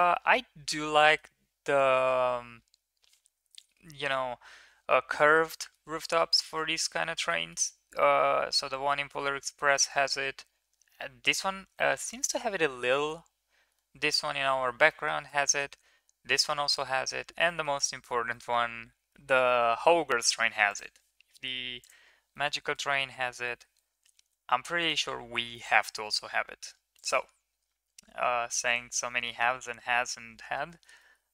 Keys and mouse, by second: 22.3 middle click, 22.7 Tab, 23.1 Tab, 24.1 ctrl+a, 29.0 middle click, 29.3 Tab, 30.6 shift+middle drag, 30.9 middle drag.